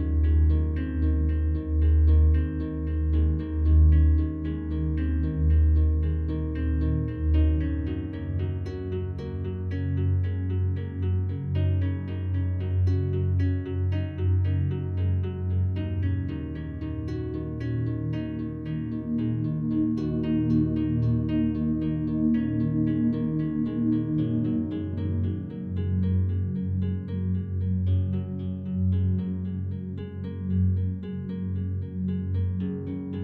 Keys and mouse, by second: 0.2 click, 1.4 click, 2.8 click, 4.5-5.7 drag, 7.1-8.5 drag, 10.3-11.3 drag, 13.0-13.9 drag, 14.4 ctrl+s, 15.8-16.9 drag, 19.4 Left, 19.9 Right, 21.7-22.3 typing, 23.1 Return, 24.3 click, 25.3 click, 26.2 click, 27.0 click, 27.9 click, 28.6 click, 30.9-33.2 drag.